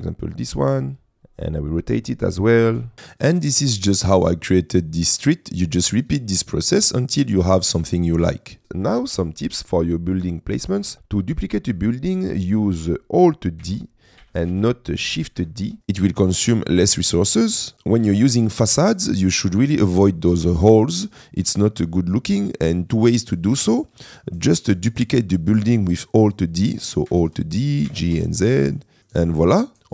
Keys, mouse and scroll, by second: 1.7-2.9 drag, 7.4 middle click, 8.6 shift+click, 9.5 middle click, 10.9 Escape, 10.9 g, 11.3 click, 11.7 middle click, 13.8 alt+d, 14.2 g, 14.6 shift+z, 15.6 Escape, 16.2 click, 18.0 middle click, 23.2 shift+middle click, 24.2-24.6 shift+middle drag, 24.8 click, 27.5 alt+d, 27.9 g, 28.1 z, 29.0 middle click.